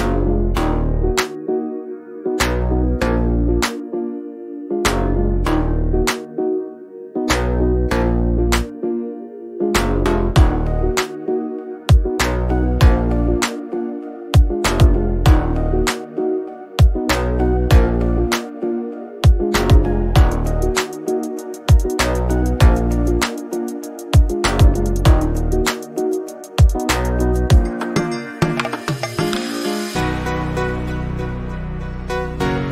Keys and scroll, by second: 0.8 ], 9.8 [.